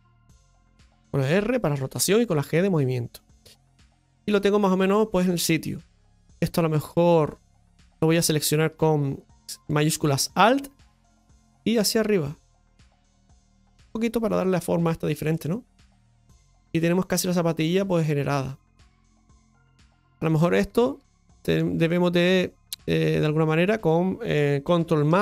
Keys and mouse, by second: 3.9 Tab, 4.5 middle click, 5.4 middle click, 6.4 middle click, 7.5 right click, 8.0 alt+shift+right click, 11.7-13.8 drag, 14.8 Tab, 15.3-19.3 middle drag, 19.7 shift+middle drag, 20.7 Tab, 21.1 shift+middle click, 21.8 middle click, 23.5 right click, 25.1-25.2 ctrl+KP_Add.